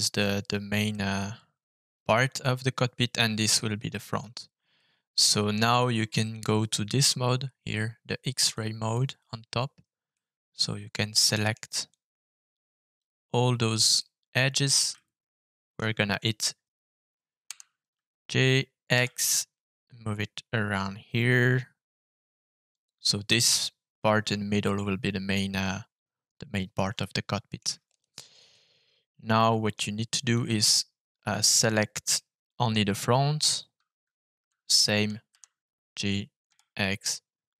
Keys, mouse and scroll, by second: 0.8-2.0 middle drag, 4.7 middle click, 6.5-7.7 middle drag, 8.5 click, 10.1-11.5 middle drag, 11.8-12.9 drag, 13.9 middle click, 14.9 shift+middle click, 17.4 g, 18.9 x, 22.7 click, 24.6-26.7 middle drag, 26.9 shift+middle click, 27.8 click, 28.4-29.7 middle drag, 30.3-31.3 drag, 32.1 middle click, 32.6 click, 35.9 g, 36.4 x.